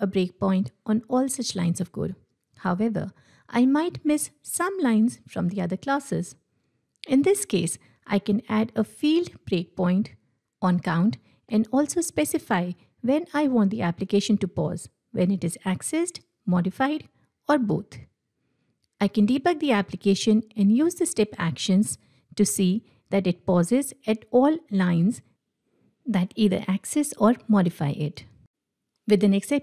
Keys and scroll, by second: 22.9 F8.